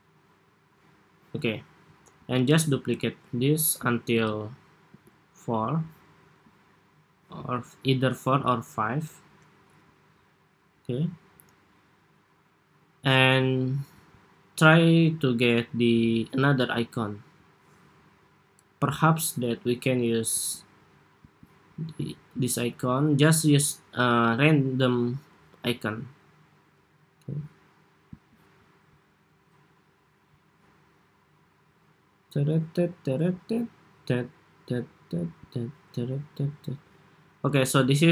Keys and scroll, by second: 2.2 super+d, 4.1 super+d, 4.7 super+d.